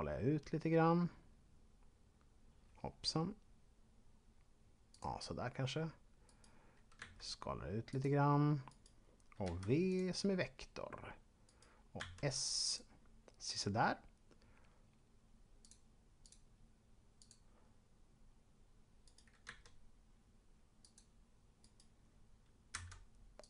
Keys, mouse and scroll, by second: 4.8 click, 6.2 right click, 7.0 s, 7.9 click, 8.7 right click, 9.3 v, 9.8 click, 11.3 right click, 12.0 s, 12.5 click, 15.5 click, 19.0 right click, 19.5 s, 20.8 click, 21.5 right click, 22.7 v, 23.3 click.